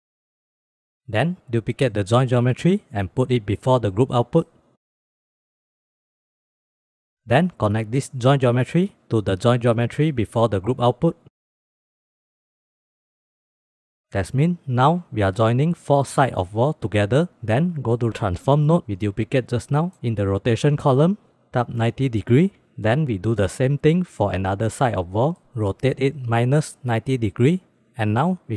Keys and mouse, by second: 0.4 click, 0.7 click, 1.1 click, 1.5 shift+d, 2.2 click, 2.8-3.4 drag, 3.7 click, 4.2-4.6 drag, 4.7 click, 5.3 click, 6.4 drag, 7.2-11.5 drag, 12.3 click, 12.9 click, 13.3 click, 17.3 drag, 18.5 drag, 19.5 click, 20.7-22.6 drag, 23.3 middle click, 24.5 middle click, 24.9-27.2 drag.